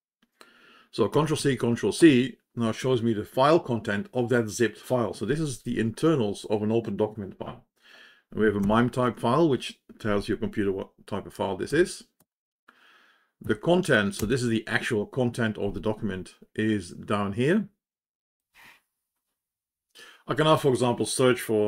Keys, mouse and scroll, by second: 1.3 ctrl+c, 8.5 Return, 13.3 Down, 14.6 Return, 18.3 ctrl+Home.